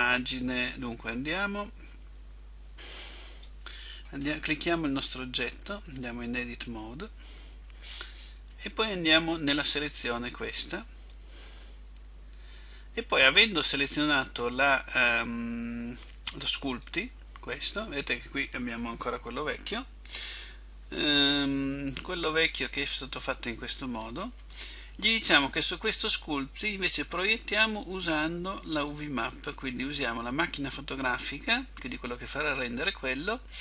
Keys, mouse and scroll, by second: 5.1 right click, 6.6 Tab, 16.9 click, 28.9 click.